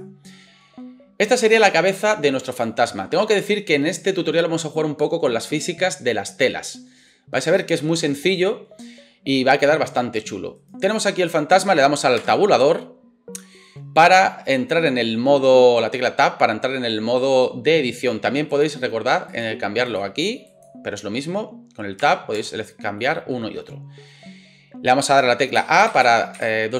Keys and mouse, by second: 10.6 right click, 10.7-26.7 drag, 12.2 Tab, 22.0 Tab, 22.4 Tab, 25.6 a, 25.9 a, 26.4 a.